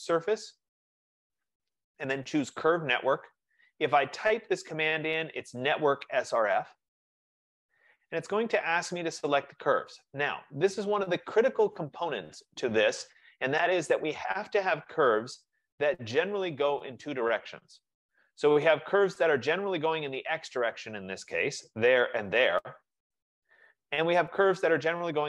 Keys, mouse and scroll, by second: 0.2 click, 2.5-5.3 drag, 6.0 F15, 8.2-9.5 drag, 20.6 click, 22.1 shift+click.